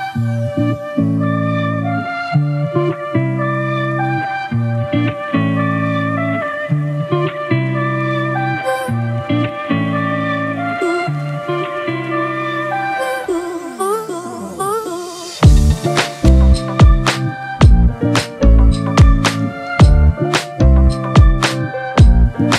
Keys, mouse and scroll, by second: 0.8-2.1 drag, 2.1-3.1 scroll down 1, 3.1 click, 3.4 scroll down 1, 4.1-4.8 drag, 5.8 click, 6.1 scroll up 2, 7.2 click, 7.8-8.4 drag, 9.1 click, 11.7-12.4 scroll up 3, 12.4-13.6 drag, 13.6 s, 15.1 click, 15.5 right click, 16.3 click, 17.1 click, 18.3 click, 19.2 click, 20.3 click, 20.9 click, 22.0 click.